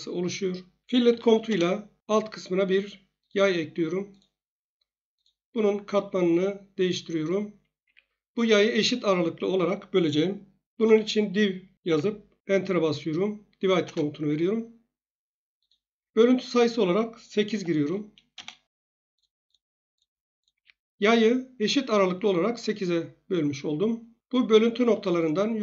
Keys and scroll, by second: 1.1 f, 1.5 Return, 7.8 Escape, 10.5-11.8 typing, 13.8 Return, 17.5 8, 18.3 Return, 20.5 Escape.